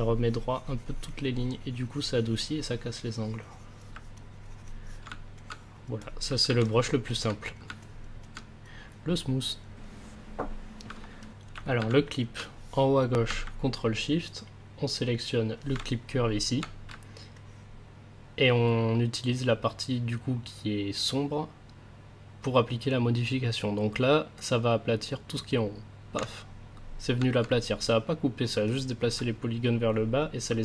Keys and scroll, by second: 5.0 a, 13.4 ctrl+s, 16.9 ctrl+s.